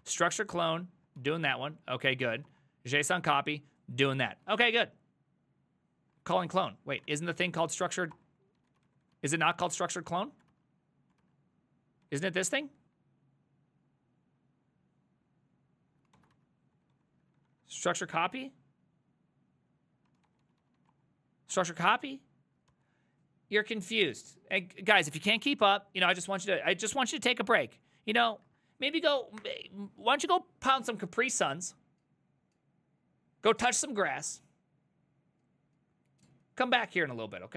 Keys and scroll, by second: 0.0-4.9 typing, 2.5 Return, 6.2-12.5 typing, 7.1 ctrl+^, 8.2 Return, 16.1-18.2 typing, 20.0-23.2 typing, 24.8-25.9 typing, 26.5 ctrl+a, 26.8 ctrl+a, 28.3 Right, 28.5 Right.